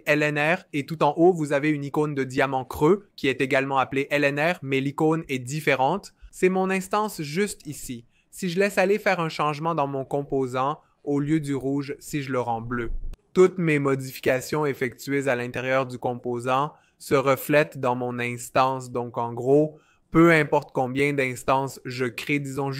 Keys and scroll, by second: 10.2-12.8 typing.